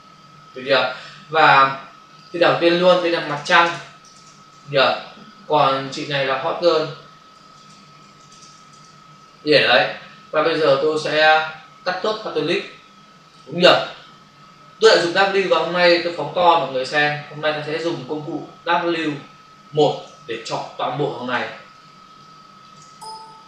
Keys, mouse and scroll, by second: 0.5 click, 2.1 click, 2.9-3.8 typing, 4.6 Return, 5.7 click, 7.4-9.3 typing, 11.1 click, 15.0 ctrl+space, 16.2 f, 17.7 ctrl+click, 20.4 ctrl+space, 21.7 ctrl+space.